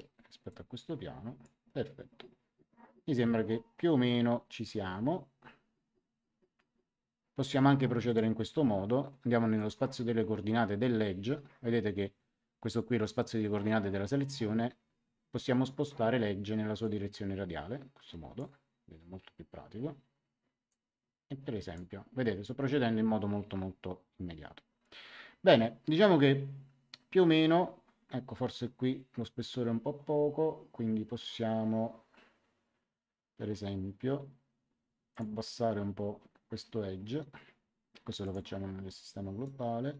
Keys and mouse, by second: 0.4 click, 8.0 click, 9.5 click, 16.8 click, 20.6 click, 35.1 click, 38.2 click, 39.4 click.